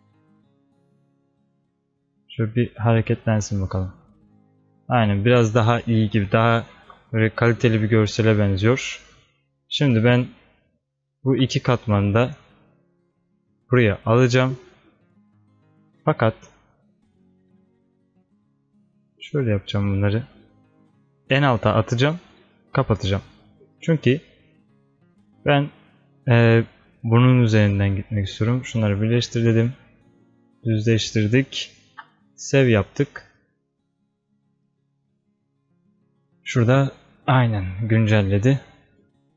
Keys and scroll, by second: 6.8 ctrl+s, 32.0 ctrl+s.